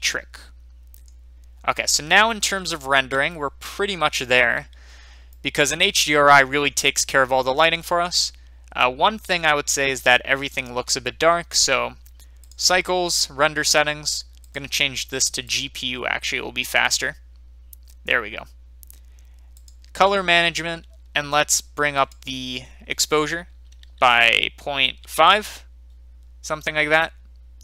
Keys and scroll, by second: 25.1 Return.